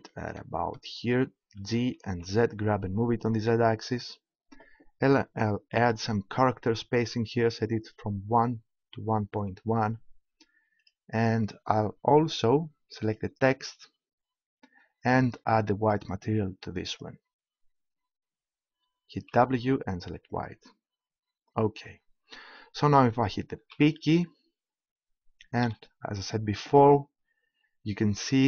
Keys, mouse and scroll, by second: 1.6 g, 3.9-5.6 drag, 8.4-9.9 drag, 9.9 middle click, 10.8 right click, 11.7 KP_Decimal, 13.0 click, 15.9-18.5 drag, 23.5 p, 25.6 p, 28.3 p.